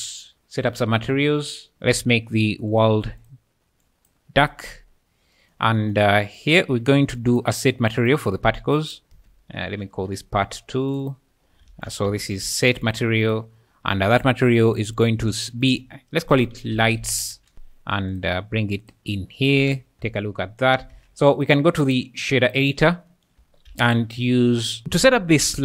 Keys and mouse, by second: 3.8 click, 6.3 click, 7.2 click, 8.7 click, 9.6 ctrl+shift+s, 11.1 ctrl+shift+s, 11.7 shift+a, 13.3 click, 15.0 click, 15.6-17.5 drag, 18.2 click, 20.9 ctrl+s, 21.4 click, 21.9 click, 23.7 shift+a.